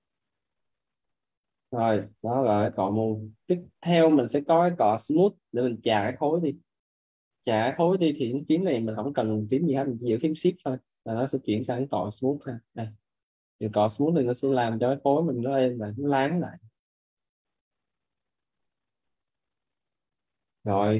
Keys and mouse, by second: 0.4 click, 1.7 right click, 2.1 alt+right click, 2.5 alt+right click, 13.7 click, 17.0 right click, 17.6 click, 18.8 right click, 19.2 alt+right click.